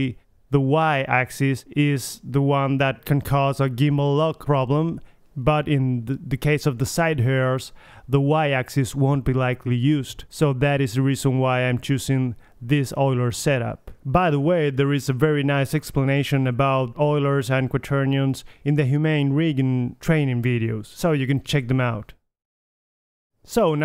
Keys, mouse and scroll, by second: 0.5-1.4 drag, 1.4-2.3 middle drag, 3.0 click, 3.2 middle drag, 6.5 middle drag, 6.7 click, 8.8-10.0 drag, 10.0-10.5 middle drag, 10.5-11.8 drag, 12.0 middle click, 13.2-14.8 middle drag, 14.8 drag, 14.9-15.3 middle drag, 15.1 r, 15.7 middle click, 16.5 middle drag, 16.7-17.5 drag, 16.9 r, 17.5 middle drag, 19.7-20.9 drag, 20.9-22.5 middle drag, 22.5 click, 23.3-23.8 middle drag.